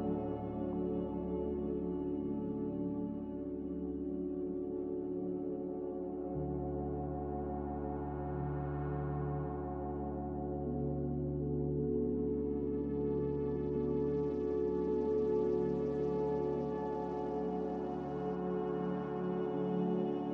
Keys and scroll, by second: 0.0-0.8 typing, 2.1 n, 3.9 z, 13.1-13.5 typing, 18.6 n.